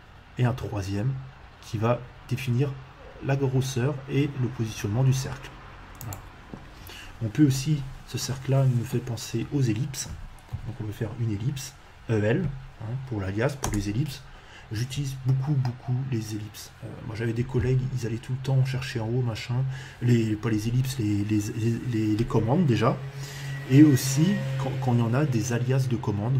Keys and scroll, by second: 10.0 e, 10.5 l, 13.6 space.